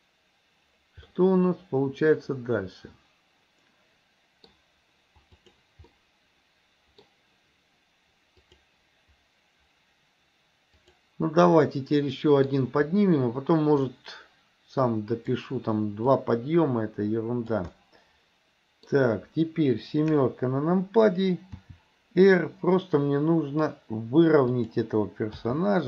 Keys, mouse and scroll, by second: 1.1-4.6 middle drag, 5.5 click, 5.9-7.1 middle drag, 8.5 click, 10.9 click, 11.6 middle click, 13.8-15.4 drag, 16.1-17.7 drag, 17.8-18.9 middle drag, 20.1 KP_7, 21.6 r, 25.5 g.